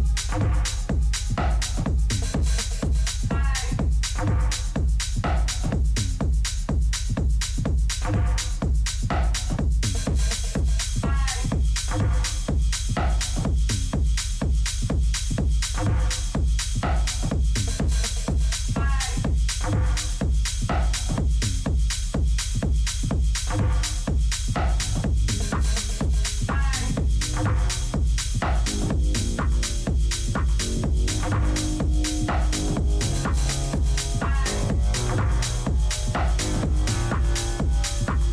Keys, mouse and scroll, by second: 33.2 middle click, 34.7-36.2 right drag, 36.2 ctrl+z, 36.8 ctrl+z, 37.3 ctrl+z.